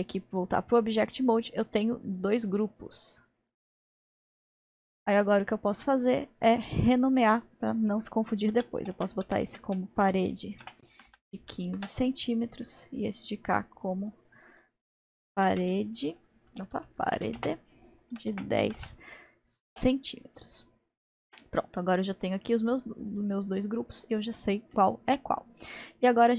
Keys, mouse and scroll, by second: 0.2 click, 0.6-1.3 scroll down 3, 1.3 click, 2.1 click, 2.9-3.6 drag, 4.0-4.5 drag, 4.6-6.1 middle drag, 6.1 click, 7.3 click, 8.0-10.5 drag, 13.3 click, 13.9 click, 14.1-16.7 drag, 16.7 BackSpace, 22.2-22.9 drag, 23.0 click, 23.6-24.5 drag, 24.8-26.3 middle drag.